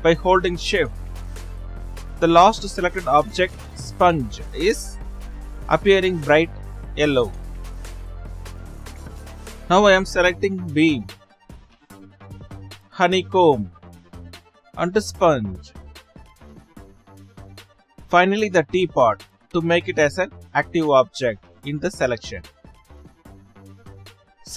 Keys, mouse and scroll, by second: 0.6 shift+Left, 1.3 shift+click, 2.1 shift+click, 2.9 shift+click, 12.6 shift+click, 13.8 shift+click, 14.9 shift+click, 16.6 shift+click, 24.2 right drag, 24.2 shift+click.